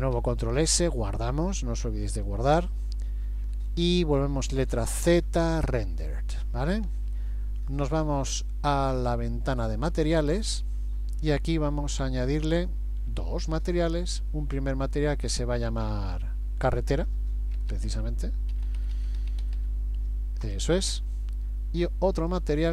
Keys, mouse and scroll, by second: 0.5 ctrl+s, 4.6 z, 9.5 click, 13.8 click, 14.7 click, 15.7 click, 17.7 BackSpace, 17.9 BackSpace, 19.0 r, 22.2 click.